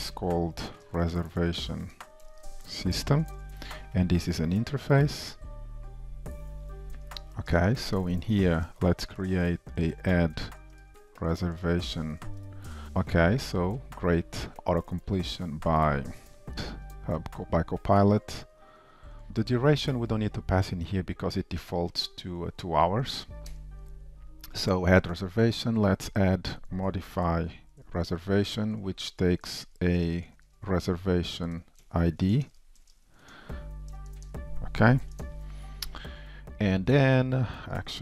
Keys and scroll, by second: 7.6 shift+Return, 15.9 Tab, 16.5 shift+super+F12, 19.4 ctrl+shift+Right, 25.0 super+d, 26.7 ctrl+shift+Left, 37.0 super+d.